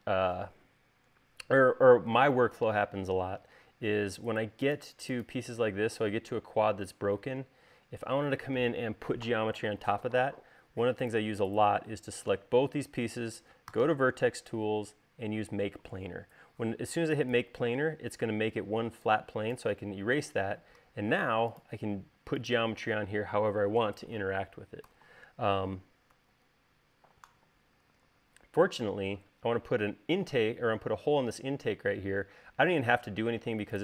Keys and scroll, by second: 14.6 v, 19.5 e, 22.0 r, 25.8 BackSpace, 26.6 super+z, 33.4 space.